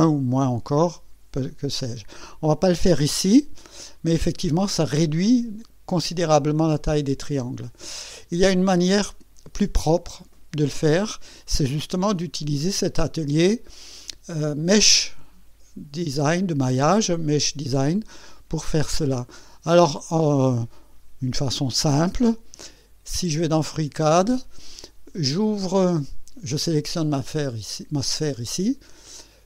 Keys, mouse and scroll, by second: 3.9 click, 12.1 click, 12.8-13.6 scroll up 2, 13.9 scroll up 1, 17.8-18.2 scroll down 1, 18.2 scroll up 1, 18.4-19.2 scroll down 2, 21.6 click, 23.4 click, 27.2 click.